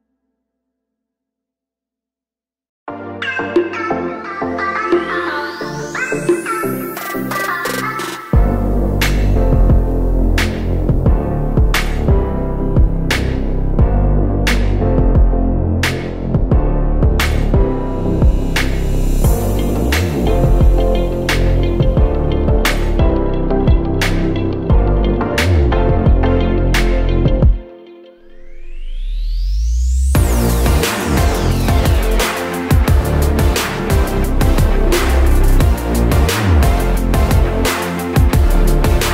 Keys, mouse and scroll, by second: 0.0 click, 0.3 Tab, 0.5 click, 1.2-6.5 middle drag, 3.2 scroll down 1, 4.2 scroll down 1, 5.8 KP_7, 6.5 click, 7.4 shift+d, 9.8 click, 10.4 r, 13.3 click, 14.0 shift+z, 14.5 g, 15.9 click, 16.1 middle click, 16.5 scroll down 2, 16.8 shift+z, 16.9 click, 17.2-21.9 middle drag, 21.1 scroll up 2, 21.9 click, 22.2 Tab, 22.4 click, 23.1 2, 23.3 click, 23.7 g, 25.2 click, 25.4 g, 28.7 Escape, 29.2 ctrl+r, 31.4-32.8 drag, 32.8 g, 35.7 click, 35.8-39.1 middle drag, 36.3 ctrl+z, 36.6 ctrl+z, 37.4 g.